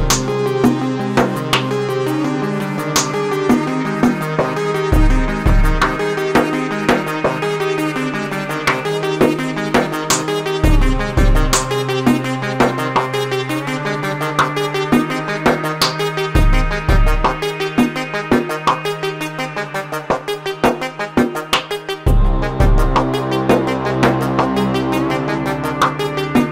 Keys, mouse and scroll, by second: 1.0 t, 3.2 Tab, 4.5 3, 4.7 click, 5.7-8.8 right drag, 8.8-17.6 drag, 17.6 Tab, 18.7 Tab, 20.0 click, 21.6-23.2 drag, 23.4-26.5 drag.